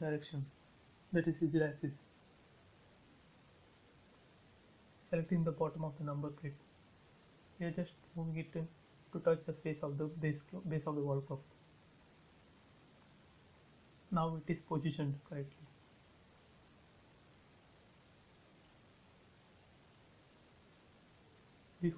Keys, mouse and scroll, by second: 1.9 m, 3.0 click, 3.8 scroll down 1, 4.3-6.4 scroll down 1, 7.3 scroll up 1, 9.6 click, 9.7 space, 9.9 scroll up 1, 10.6 middle click, 11.3 scroll down 1, 11.9 middle click, 12.4 scroll down 1, 13.2-14.9 middle drag, 14.9 click, 16.5-17.1 scroll down 1, 17.3 click, 17.7 scroll up 1, 18.2 middle click, 19.4-19.8 scroll up 1, 19.8-20.2 scroll down 1, 20.2-21.7 shift+middle drag, 21.7 b.